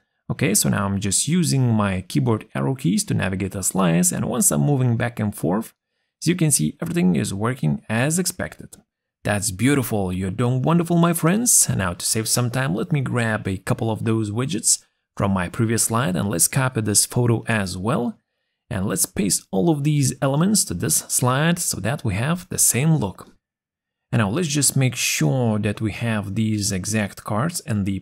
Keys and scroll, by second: 20.4 ctrl+c.